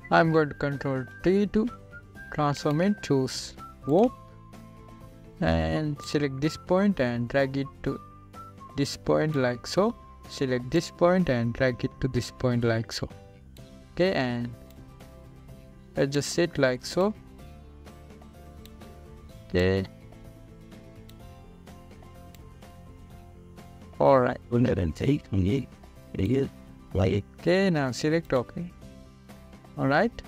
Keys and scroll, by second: 2.5 ctrl+t.